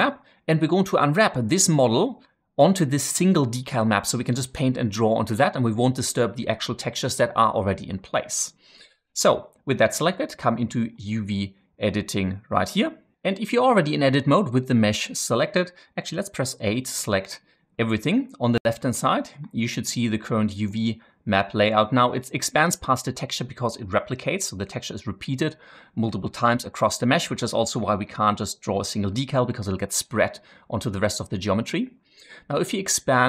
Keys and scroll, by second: 0.0-0.2 typing, 16.3 a.